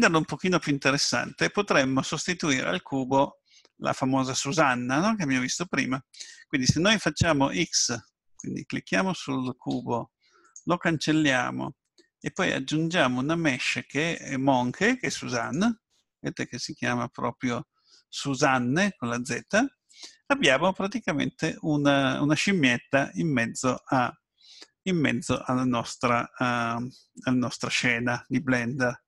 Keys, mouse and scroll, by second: 8.3 click, 9.7 x, 12.2 click, 20.3-20.9 scroll up 4, 21.5 scroll up 1, 22.0 middle click, 25.4 scroll up 1, 25.6-26.5 scroll down 6, 26.8 middle click.